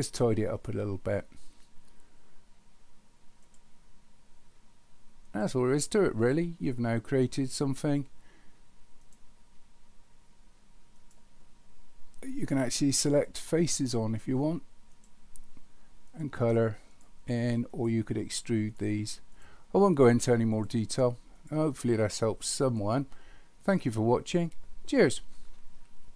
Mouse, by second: 3.6-5.5 drag, 9.1-11.1 drag, 15.0 click, 16.1 click, 17.7 click, 19.4 click, 20.0 click, 20.5 click, 21.4 click, 22.0 click, 23.7 click.